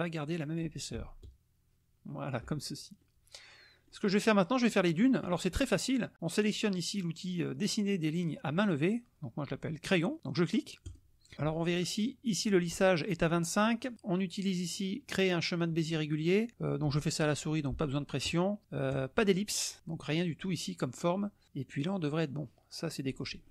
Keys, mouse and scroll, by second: 1.2 ctrl+shift+click, 3.0-4.0 drag, 4.7 click, 10.8 click, 18.9-20.4 drag.